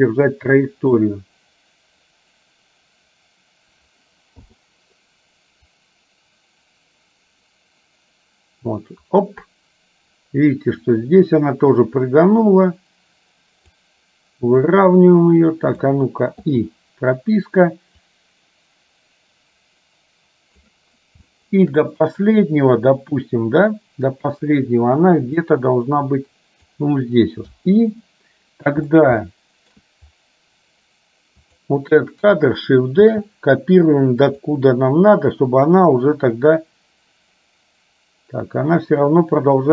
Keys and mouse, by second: 4.5 i, 6.0-11.1 drag, 11.9-13.9 drag, 14.9-16.0 drag, 18.2-20.9 drag, 21.4 shift+middle click, 25.5-26.9 drag, 29.5 shift+middle click, 31.6 click, 33.2 shift+d, 36.6-39.7 drag.